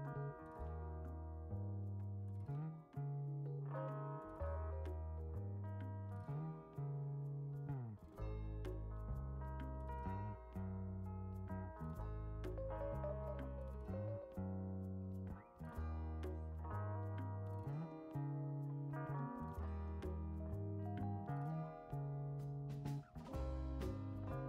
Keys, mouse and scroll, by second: 2.8 click, 6.2 click, 7.1-7.6 scroll down 4, 7.7-9.0 right drag, 12.8 click, 14.7 click, 15.7 click, 16.4 right click, 18.4 click, 21.4 ctrl+click, 22.8 ctrl+click.